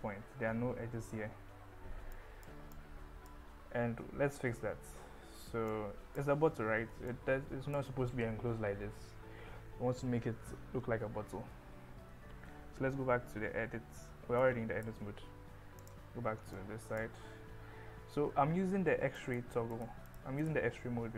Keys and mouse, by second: 2.2 click, 2.7 click, 5.8 click, 7.2 click, 12.5 Tab, 13.1 Tab, 14.5 click, 15.8 click, 16.5 click, 19.2 click, 19.8 click, 20.1 click.